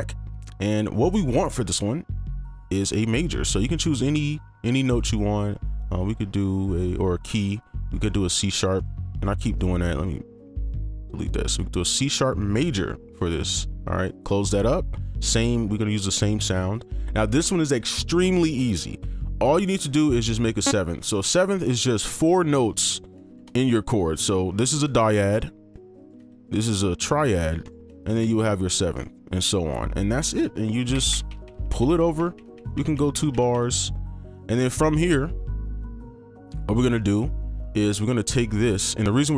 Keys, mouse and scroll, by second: 8.7 right click, 16.2 right click, 21.1 ctrl+click, 23.2 ctrl+click, 25.0 ctrl+click, 25.3 right click, 26.2 shift+click, 27.1 ctrl+click, 28.2 shift+click, 28.9 right click, 30.0 ctrl+click, 31.1 ctrl+b, 31.1 ctrl+b, 31.3 ctrl+b, 31.4 ctrl+b, 31.6 ctrl+b, 31.8 ctrl+b, 32.0 ctrl+b, 32.2 ctrl+b, 32.3 ctrl+b, 32.5 ctrl+b, 32.7 ctrl+b, 32.9 ctrl+b, 33.1 ctrl+b, 33.3 ctrl+b, 33.5 ctrl+b, 34.3 right click, 38.2 ctrl+click.